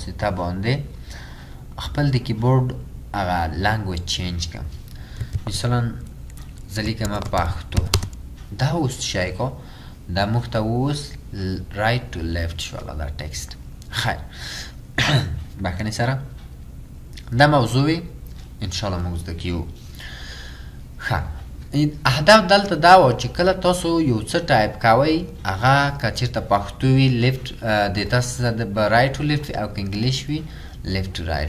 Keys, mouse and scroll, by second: 5.3 typing, 7.1-8.0 typing.